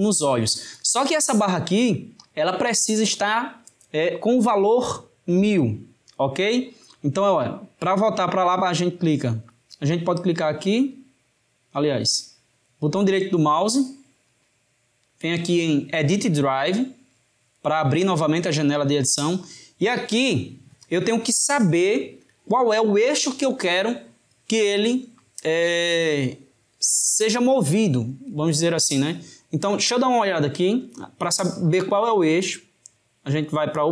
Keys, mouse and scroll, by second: 10.8-13.7 drag, 13.7-16.6 right drag, 31.7-33.9 drag.